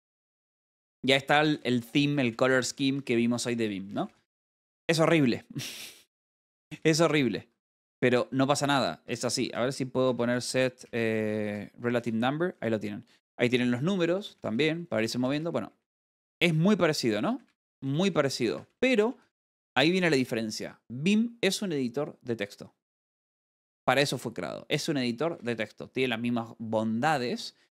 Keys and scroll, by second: 1.5-2.2 typing, 5.0 k, 7.7 a, 8.0 Escape, 11.1-12.4 typing, 13.0 Tab, 13.7-16.3 typing, 21.3 e, 23.7 Escape, 25.7 k.